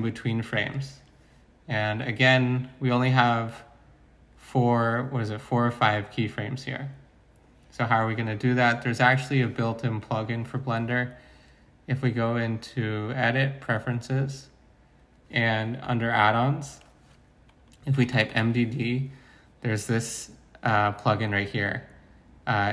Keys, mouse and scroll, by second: 17.9-18.3 typing.